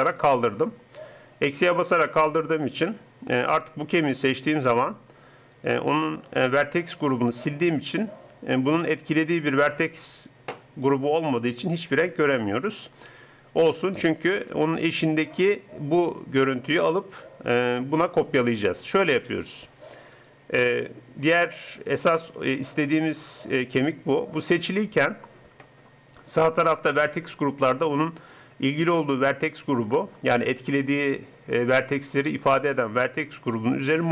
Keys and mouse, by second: 0.0-1.9 drag, 2.7-7.5 drag, 14.6-19.5 drag, 20.3-22.0 drag.